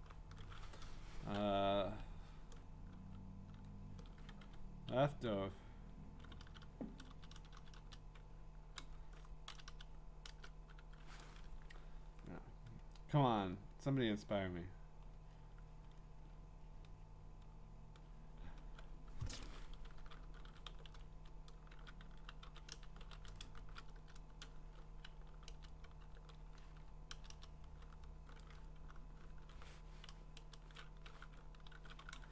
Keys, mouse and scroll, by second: 3.5-7.8 typing, 9.5 BackSpace, 9.7 BackSpace, 10.3 Return, 12.1-14.0 scroll, 14.4-17.2 scroll, 17.6-18.6 scroll, 20.1-27.1 typing, 20.4 middle click, 22.7 scroll down 1, 29.2-30.4 typing, 31.5-32.3 typing.